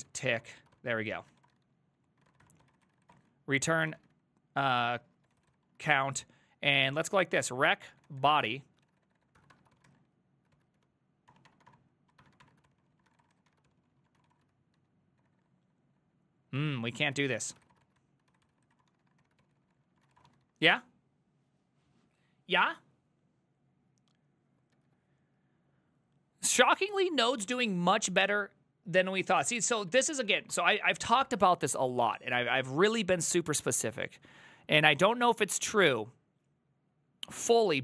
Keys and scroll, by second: 0.0-21.0 typing, 24.8 alt++, 26.6 alt+{, 27.5-28.3 typing, 29.5-30.7 typing.